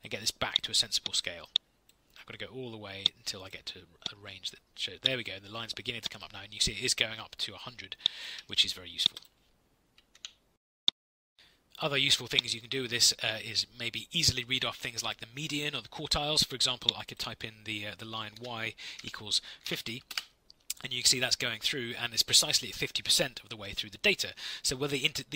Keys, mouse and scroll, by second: 10.1 ctrl+F8, 18.3-20.1 typing.